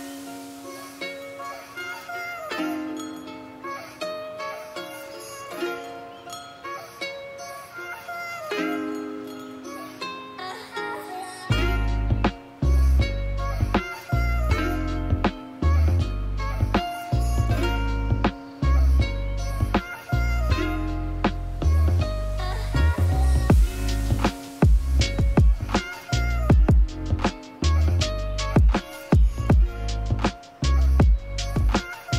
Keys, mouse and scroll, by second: 1.0 click, 1.3 click, 1.9 click, 2.3-3.6 drag, 3.7 click, 5.3 click, 6.2 click, 6.5 click, 7.4 click, 8.3 click, 8.8 click, 9.1 click, 9.7 click, 10.7 click, 11.3 click, 11.6 click, 12.3 click, 13.3-15.3 drag, 16.9-25.7 drag, 25.7-26.0 shift+middle drag, 26.5 click, 27.0 click, 27.5 middle click, 28.3 click, 28.8 click, 29.3 middle drag, 29.7 click, 30.3 click, 30.4 middle click, 30.8 shift+f, 31.4 f, 31.9-32.1 drag.